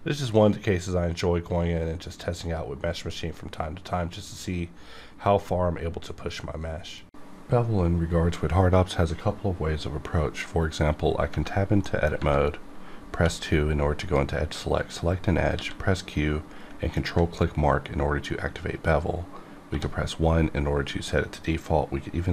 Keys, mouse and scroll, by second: 0.0 scroll down 1, 0.3-3.5 middle drag, 13.1 2, 14.0 click, 15.5 q, 16.9 ctrl+click, 17.8 scroll up 1, 19.7 1.